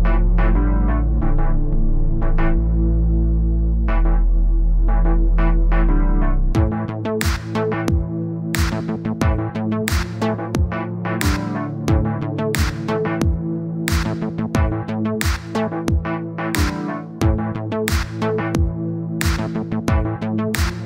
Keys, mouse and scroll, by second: 1.9-4.7 drag, 4.7-5.9 middle drag, 6.8-8.4 drag, 8.4 KP_1, 9.4 click, 11.0 click, 11.4 click, 12.0 click, 12.3-13.5 drag, 14.1 click, 14.2 click, 14.4 click, 14.5 click, 15.2 scroll down 2, 15.4 middle click, 15.7-16.6 scroll up 1, 16.6 click, 17.8 click, 19.4 click, 20.4 click, 20.7 middle click.